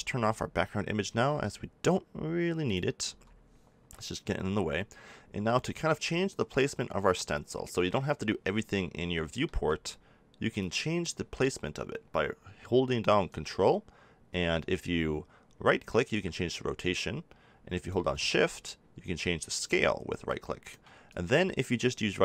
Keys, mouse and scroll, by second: 3.0 n, 7.5-9.1 middle drag, 10.6 click, 13.2-14.3 middle drag, 14.3-15.3 drag, 18.2-20.1 drag, 21.0-22.2 drag.